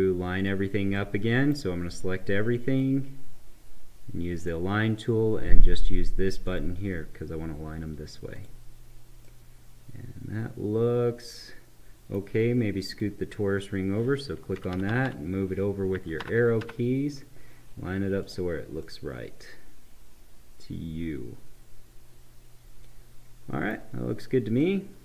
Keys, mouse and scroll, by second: 0.3 click, 0.9 right click, 1.9-4.4 drag, 9.3-12.9 right drag, 12.9 click, 14.5 Right, 18.2 click, 18.8-25.0 right drag.